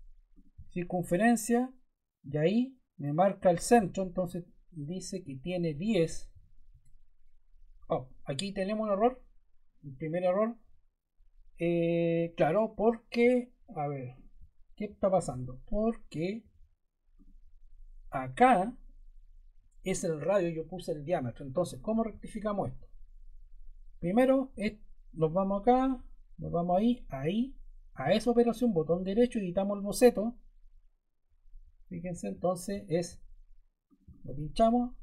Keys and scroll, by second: 5.8-6.7 typing.